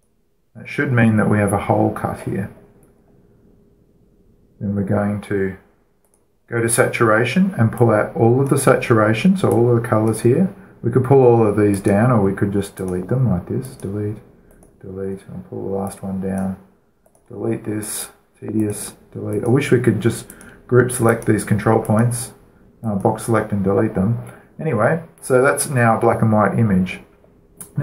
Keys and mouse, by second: 3.2-5.3 middle drag, 6.4-25.0 drag.